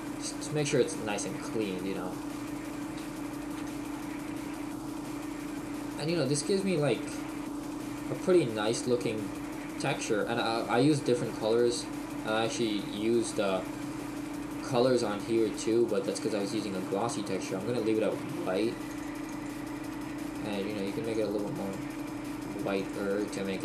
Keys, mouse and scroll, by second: 5.7 scroll up 3, 5.9-6.4 scroll down 3, 6.4 middle click, 8.4 middle click, 10.8-11.1 scroll down 1, 11.1 middle click, 14.3-21.1 scroll up 2, 21.1 click, 22.8 click.